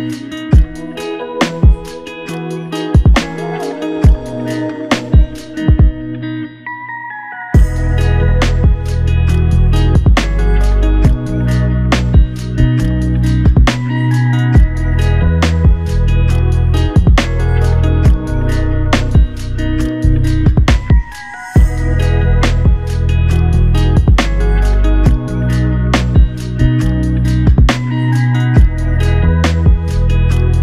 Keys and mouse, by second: 15.6 ctrl+click, 17.0 alt+click, 24.4 double click, 25.8-27.4 typing, 29.7 alt+click.